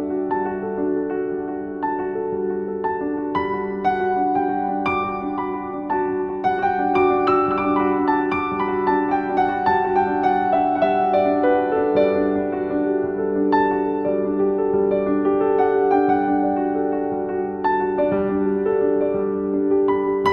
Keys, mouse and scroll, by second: 2.3 s, 8.0 s, 10.3 s, 12.7-13.4 scroll down 2, 13.4 g, 16.3 s, 17.8 g.